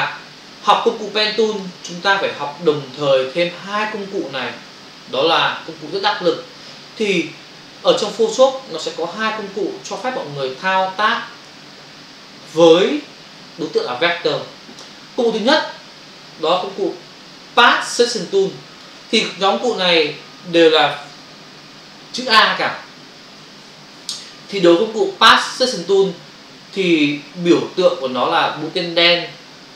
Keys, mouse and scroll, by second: 0.1 f, 0.4 ctrl+space, 2.2 ctrl+space, 4.5 space, 5.1 ctrl+-, 8.8 click, 16.5 click, 18.2 ctrl+click, 19.5 ctrl+-.